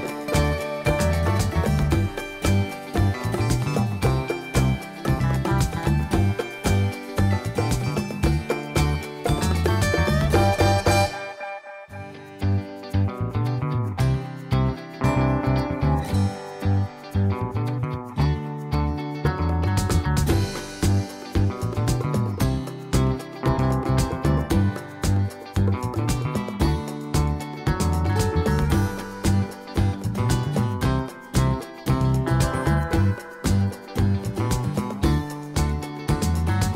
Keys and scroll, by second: 7.4 1, 7.5 Return.